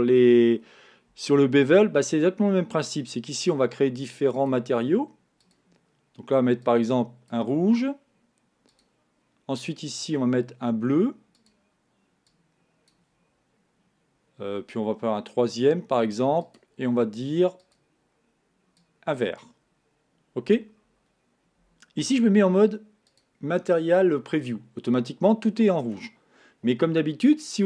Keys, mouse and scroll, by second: 3.7-5.6 drag, 8.8-10.5 drag, 11.4 click, 15.6-17.0 drag, 17.7 click, 22.1 z, 24.5-27.5 middle drag.